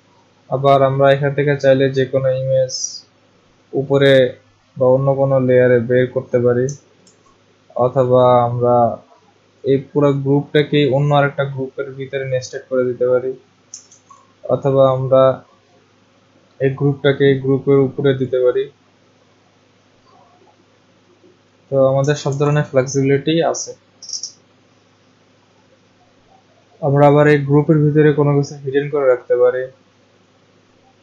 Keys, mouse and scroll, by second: 1.4 click, 5.6 click, 7.0 ctrl+z, 9.6 click, 12.2 click, 13.9 ctrl+z, 18.2 click, 22.2 ctrl+z, 27.7 click, 28.4 click, 30.3 click, 30.7 click.